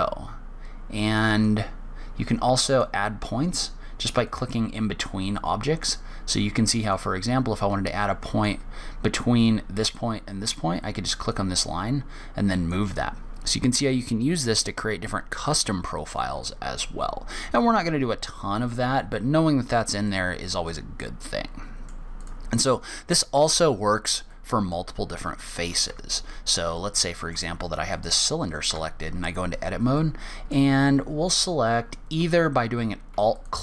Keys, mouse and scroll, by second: 1.8 click, 4.6 click, 7.3 click, 11.7 click, 16.0 middle click, 19.7-20.4 scroll down 1, 20.4 middle click, 22.6 click, 24.7 middle click, 25.7-26.2 scroll up 1, 26.2 Tab, 27.1 shift+middle click, 28.3 click, 29.0 Tab, 30.3 middle click.